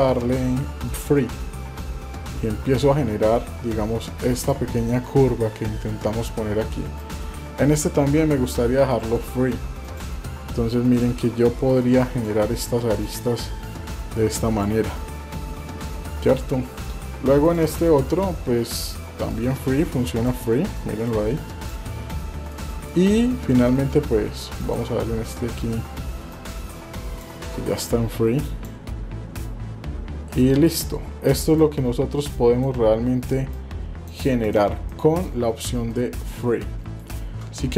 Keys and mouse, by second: 1.8-4.6 drag, 7.0 click, 11.0-12.3 drag, 13.0-14.6 drag, 17.4 click, 18.0 shift+middle click, 19.3 click, 21.1 click, 22.7 shift+middle click, 23.6 shift+middle click, 24.6 click, 26.3 click, 27.8 click, 30.7 click, 31.5-32.6 drag, 33.5 click, 34.4 click, 35.0 shift+middle click, 36.0-37.1 shift+middle drag.